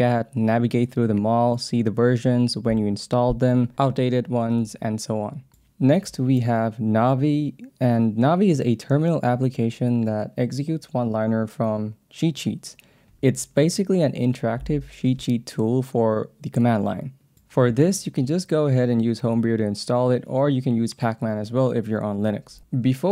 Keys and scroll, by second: 0.0 k, 0.5 f.